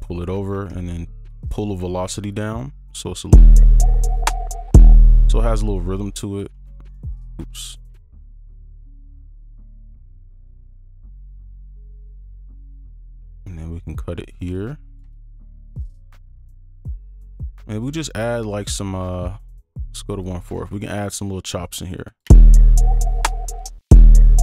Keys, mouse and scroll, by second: 0.8 alt+scroll down 1, 4.9 space, 5.7 right click, 6.5 ctrl+z, 6.8 right click, 7.3 ctrl+z, 8.1 ctrl+alt+z, 8.5 ctrl+alt+right click, 8.8 ctrl+click, 13.0 right click, 14.5 ctrl+click, 16.6 shift+click, 18.0 right click, 20.5 right click, 22.2 space, 23.5 space, 24.2 right click.